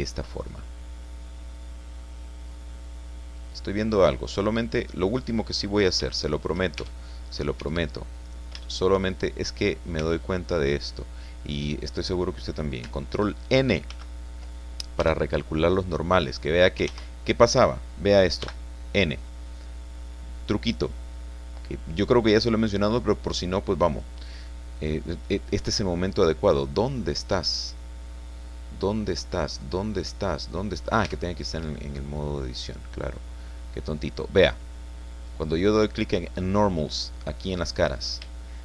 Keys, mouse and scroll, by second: 0.9 scroll down 2, 1.5 click, 2.6 scroll up 2, 4.0 click, 5.1 click, 5.7 scroll up 1, 6.1 shift+middle click, 6.8 shift+Tab, 7.2-7.6 shift+scroll up 3, 7.6 Tab, 8.2 right click, 8.6 shift+middle click, 8.8 shift+click, 10.0 shift+Tab, 10.4 shift+middle click, 10.7 shift+click, 13.9 ctrl+n, 15.0 Tab, 15.7 scroll down 2, 16.8 ctrl+z, 18.4 n, 19.1-20.2 scroll down 2, 20.2 scroll down 1, 23.9 click, 24.8 click, 27.0-27.3 scroll up 2, 27.6-28.4 scroll up 4, 28.7-29.4 scroll up 2, 29.6-30.2 scroll up 4, 30.2-30.5 scroll down 2, 31.0 Tab, 32.0-33.7 scroll down 6, 37.1 click, 37.8-38.2 scroll up 3, 38.4 shift+click.